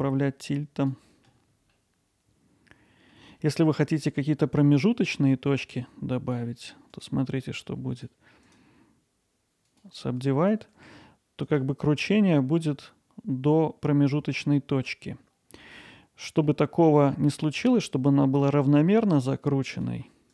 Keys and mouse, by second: 1.7-3.1 alt+middle drag, 3.4 middle drag, 3.8 alt+middle click, 5.8 click, 6.9 click, 7.6 click, 8.5-9.8 right drag, 10.4 click, 11.4-15.6 drag, 15.6 middle click, 19.3 click.